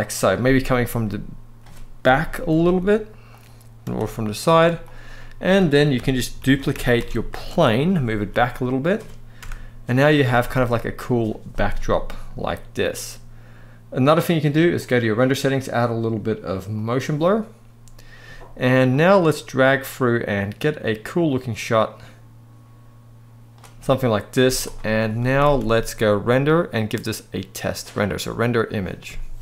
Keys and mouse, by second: 1.7 KP_7, 2.3 g, 3.5 r, 4.1 click, 4.6 drag, 4.8-5.2 middle drag, 5.6-6.7 typing, 7.0 Return, 7.9 g, 8.5 click, 9.1 KP_0, 9.9 s, 10.1 x, 10.7 click, 16.4 click, 18.6-23.3 drag, 24.1 z, 25.0 ctrl+s, 25.2 ctrl+s, 26.3-29.4 drag.